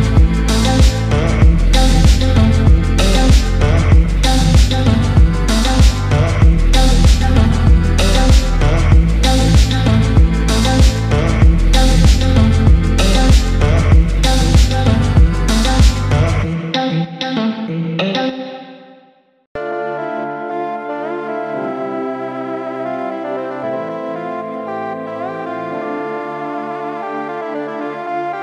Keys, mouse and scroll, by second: 0.0-1.5 drag, 4.0 click, 5.0 click, 5.9-6.4 scroll down 2, 6.1-6.9 middle drag, 7.6 shift+a, 11.9-13.8 drag, 14.2-15.8 drag, 17.0 KP_Decimal, 17.9-18.7 middle drag, 19.3 shift+a, 23.6-24.7 drag, 25.1-25.9 scroll down 2, 26.2-26.6 scroll down 2, 26.9 click.